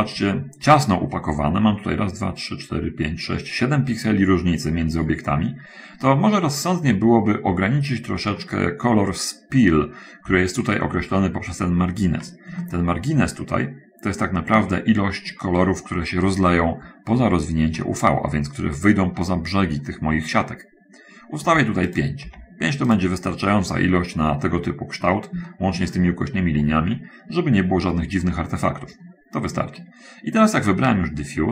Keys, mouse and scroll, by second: 5.2 middle click, 7.0 middle click, 8.7 middle click, 13.0-15.1 ctrl+middle drag, 18.2 middle click, 22.3 click, 22.6 5, 23.1 click, 24.2 middle click, 25.8 shift+click, 26.7 middle click, 27.2 middle click, 28.0 middle click, 28.6 shift+click.